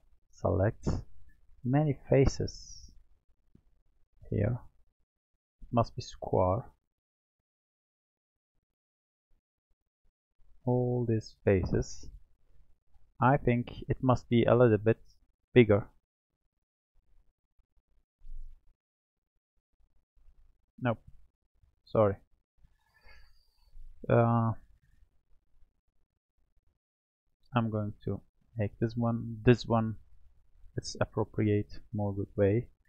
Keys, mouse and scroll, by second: 1.6 click, 3.2 shift+click, 3.8 shift+click, 4.4 shift+click, 5.1 shift+click, 5.6 shift+click, 6.3 shift+click, 6.8 shift+click, 7.6 shift+click, 8.3 shift+click, 8.9 shift+click, 9.5 shift+click, 10.0 shift+click, 10.5 shift+click, 11.0 shift+click, 11.8 shift+click, 14.8 shift+click, 19.0 alt+shift+click, 19.8 alt+shift+click, 20.9 click, 22.5 click, 24.0 w, 27.0-28.4 drag, 28.4 ctrl+KP_Add, 29.3 ctrl+KP_Add.